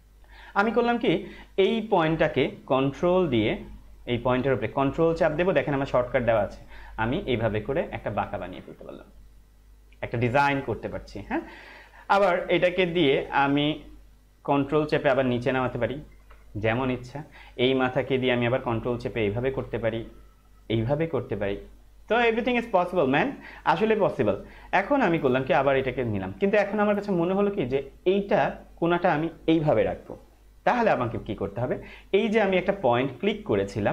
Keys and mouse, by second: 6.5 ctrl+click, 14.9 ctrl+click, 18.4 ctrl+click, 20.6 ctrl+click, 25.6 ctrl+Num_Lock, 25.6 ctrl+click.